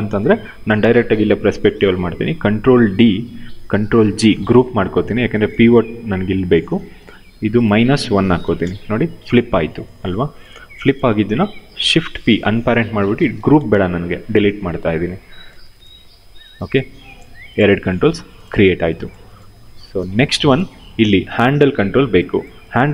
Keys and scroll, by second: 2.5 ctrl+d, 3.8 ctrl+g, 7.8 -, 8.2 Return, 11.8 shift+p, 13.7 Delete.